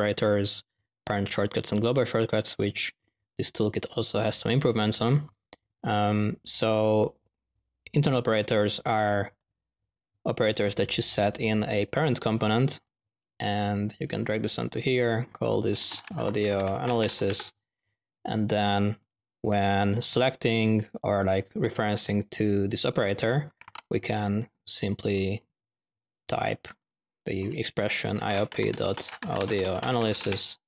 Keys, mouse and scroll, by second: 5.7-6.3 drag, 6.5-7.1 drag, 7.9 click, 8.3 drag, 9.4 ctrl+alt+q, 10.2 click, 11.9 typing, 12.1 drag, 12.5-12.9 drag, 13.5-14.7 drag, 15.0 click, 18.6-19.0 drag, 20.6 click, 23.1 click, 23.3-24.1 typing, 25.0 drag, 26.2 click, 26.7 click.